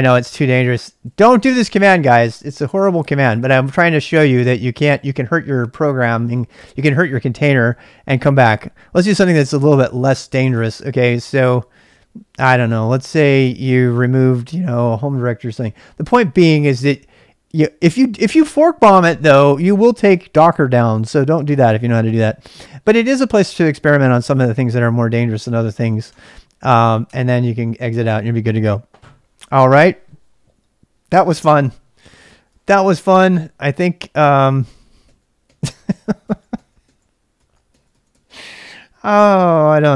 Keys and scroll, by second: 0.9-1.7 typing, 10.6-11.5 typing, 13.7-15.2 typing, 25.5-26.6 typing, 27.0 Return, 28.9 typing, 32.3-38.2 typing, 33.2 ctrl+[, 39.5 ctrl+a, 39.7 ctrl+a.